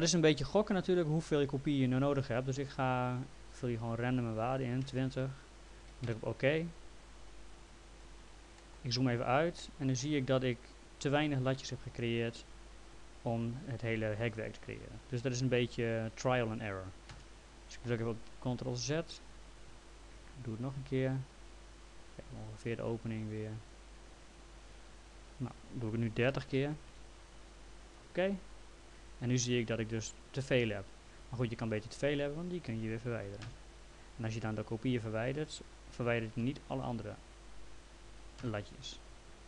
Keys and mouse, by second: 3.6 click, 4.9 KP_0, 6.0 Return, 7.5 click, 8.6 middle click, 16.9-17.6 typing, 19.9 click, 25.4 click, 26.3 KP_3, 26.4 KP_0, 26.9 Return, 26.9 KP_Enter, 27.9 click, 29.5 middle click, 32.0 click, 33.4 Delete, 36.3 Delete, 37.2 click, 38.4 Delete.